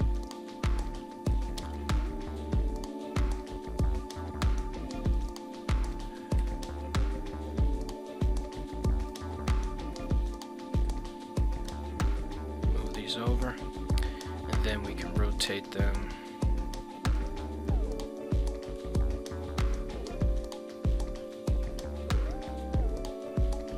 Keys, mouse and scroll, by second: 0.1 click, 1.3 g, 1.7 z, 5.1 click, 5.9 g, 6.4 z, 9.1 click, 9.9 a, 10.8 g, 11.6 x, 12.8 click, 13.1 z, 14.8 r, 15.1 z, 17.2 click, 17.6-18.7 middle drag, 19.3 r, 19.7 z, 22.1 click, 22.6 g, 23.0 y.